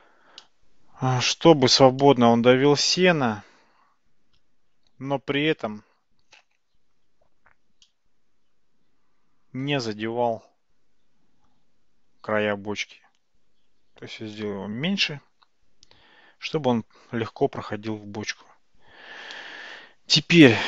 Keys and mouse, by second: 0.4-1.2 middle drag, 2.0-4.4 shift+middle drag, 7.9-10.1 middle drag, 14.4-17.0 middle drag.